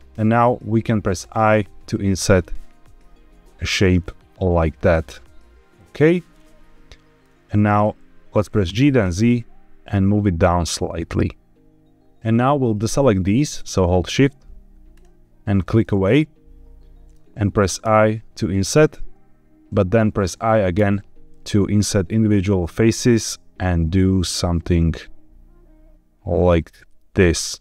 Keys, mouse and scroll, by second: 5.7 shift+click, 6.3 middle click, 7.7 middle click, 8.6 g, 8.9 z, 13.7 shift+click, 14.8 shift+click, 16.1-17.1 middle drag, 17.7 i, 20.7 i.